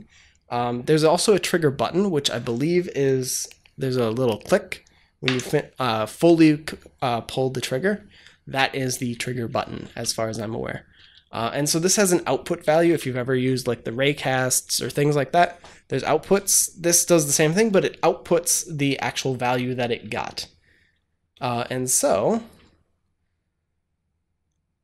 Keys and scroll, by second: 9.8 space, 12.2-13.1 typing.